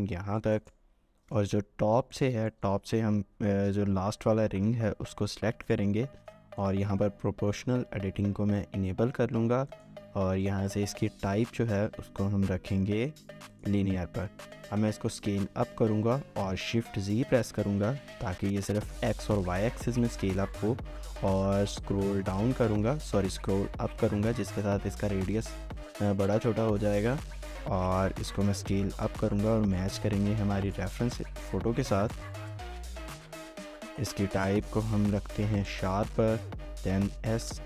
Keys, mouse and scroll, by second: 0.9 scroll up 1, 1.2 shift+middle click, 2.1 alt+click, 2.5 shift+middle click, 14.6-15.3 typing, 16.7 typing, 21.8 scroll up 1, 23.7 scroll down 1, 24.0-24.4 scroll up 1, 24.4 scroll down 1, 24.7-25.0 scroll up 1, 25.0 scroll down 1, 25.2 scroll up 1, 25.4 scroll down 1, 25.7 scroll up 1, 26.0-26.6 scroll down 1, 26.6-27.8 scroll up 1, 27.9 shift+z, 30.3-31.2 scroll down 1, 31.2 shift+z, 32.7 right click, 37.3 shift+z.